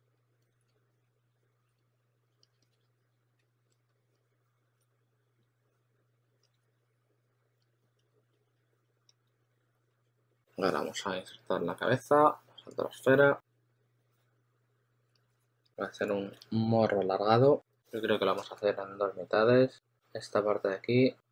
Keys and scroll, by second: 0.7-3.3 typing, 7.5 s, 8.2 s, 8.5 s, 9.8 2, 15.2-16.7 typing, 18.4 shift+super+d, 18.9 shift+super+d.